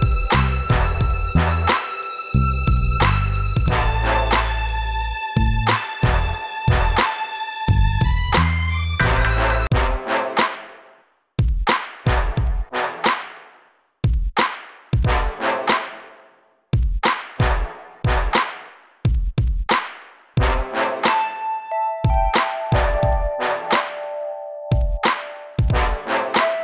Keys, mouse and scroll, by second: 1.3 right click, 2.3 scroll up 1, 3.3 click, 4.4 right click, 5.2 click, 6.1 middle click, 7.4 click, 8.2 click, 9.9 click, 11.7 scroll down 1, 12.9-13.3 scroll up 2, 13.7 scroll down 2, 17.2 click, 18.7 click, 22.1 click, 22.2 click, 22.7 click, 24.9 click.